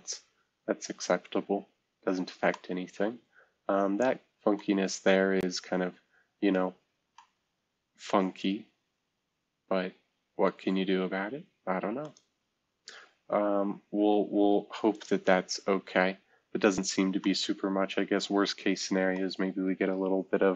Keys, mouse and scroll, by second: 0.4-2.1 scroll up 4, 2.5-4.3 middle drag, 5.0-6.3 scroll up 2, 6.3-7.9 scroll down 2, 10.7-12.1 scroll down 2, 13.7-14.7 scroll down 2, 15.0 click, 16.2-16.8 scroll down 2, 16.8-17.6 scroll up 2.